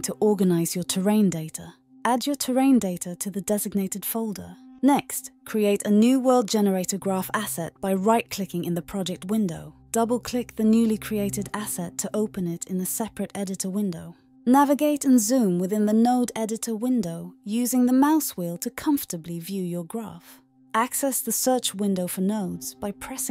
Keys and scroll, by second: 0.0-0.1 typing, 22.7-23.3 typing.